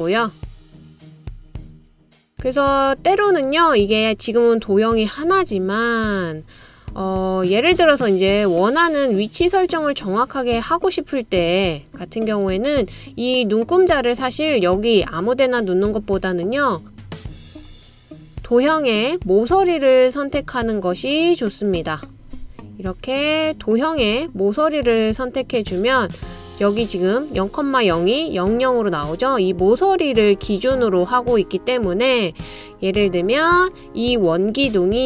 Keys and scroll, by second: 1.6 typing, 16.8 typing.